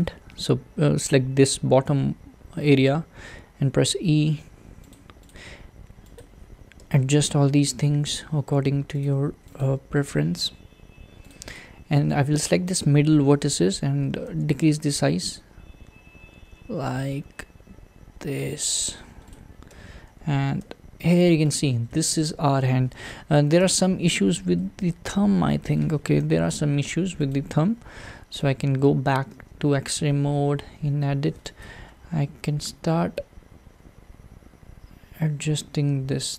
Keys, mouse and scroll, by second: 1.4 e, 5.3 click, 6.2 click, 6.8 g, 9.6 click, 9.8 g, 11.6 click, 12.7 click, 14.3 a, 19.3 click, 19.7 Tab, 20.6 alt+z, 21.1-21.5 scroll up 1, 21.5 click, 21.9-26.5 shift+middle drag, 26.5 `, 27.3 click, 28.4 Tab, 29.3 alt+z, 30.3-31.6 scroll up 3, 31.6 click, 32.5 g.